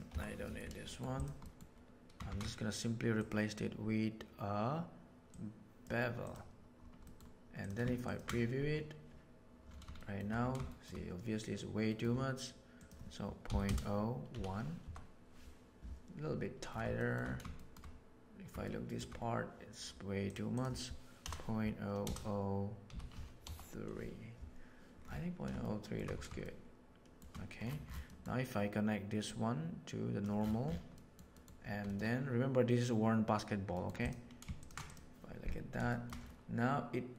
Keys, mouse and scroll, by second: 0.1 Delete, 0.8 middle click, 1.1 click, 2.2 shift+a, 7.0 middle click, 8.0 ctrl+shift+click, 9.9 shift+middle click, 10.6 shift+middle drag, 11.8 middle click, 12.7-15.8 drag, 16.9 shift+middle drag, 17.5 shift+middle drag, 18.5-18.9 shift+middle drag, 20.3-24.3 drag, 25.6-25.9 shift+middle drag, 26.5-27.1 shift+middle drag, 28.1 middle click, 29.2-30.1 drag, 31.0 middle drag, 31.3 middle click, 34.5 ctrl+shift+drag, 34.8 click, 35.8 shift+middle drag.